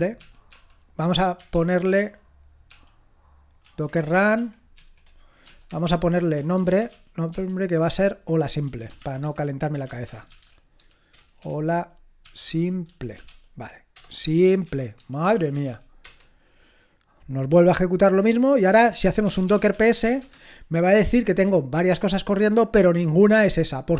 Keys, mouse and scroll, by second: 0.1 ctrl+p, 0.5 ctrl+p, 1.5 ctrl+p, 2.0 ctrl+p, 13.2 space, 15.3-16.0 typing, 19.0-20.5 typing.